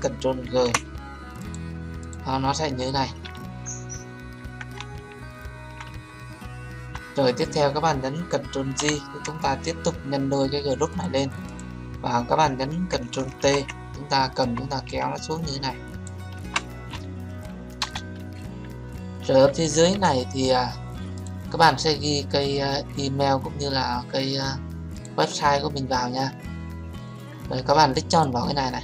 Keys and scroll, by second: 0.4 ctrl+g, 8.7 ctrl+j, 13.3 ctrl+t, 17.7 Return.